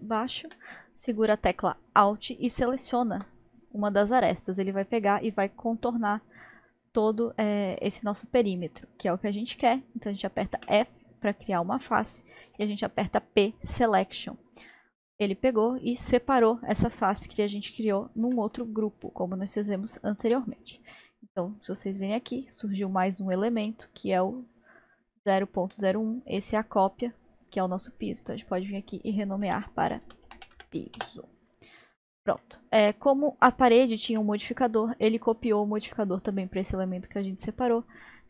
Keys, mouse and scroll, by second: 2.7 alt+click, 10.6 f, 12.6 p, 14.7-19.4 middle drag, 19.4-19.8 scroll down 1, 20.2 Tab, 20.9 middle click, 21.6 click, 23.3-23.6 drag, 23.9 click, 27.1-31.8 drag, 32.4-37.0 middle drag, 37.7-38.2 middle drag.